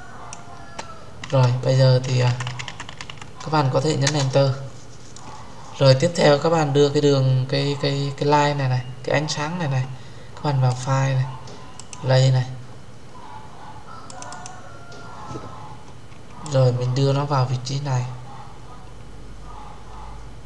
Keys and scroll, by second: 3.9 Return.